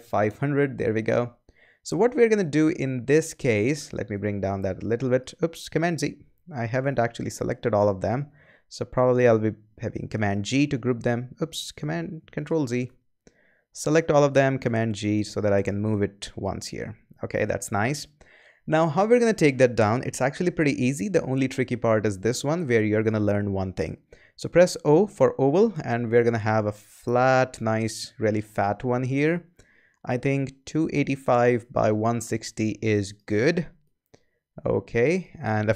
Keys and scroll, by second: 0.0-0.3 typing, 5.7 super+z, 10.1 super+g, 11.7 super+z, 14.5 super+g, 24.3 o.